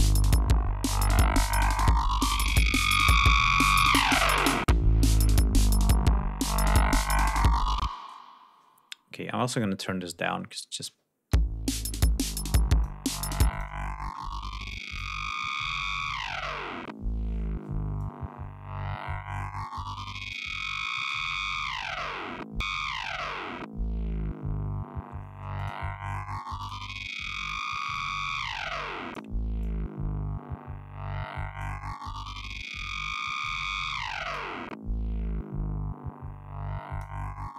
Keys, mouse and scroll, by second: 7.4 space, 9.4-10.4 drag, 10.9 l, 11.8 click, 13.1 click, 14.3 click, 17.6-20.1 drag, 21.3 click, 24.5 click, 25.5 click, 26.8-28.2 drag, 28.5-30.7 drag, 32.3 click, 33.9-36.8 drag, 37.4-37.5 drag.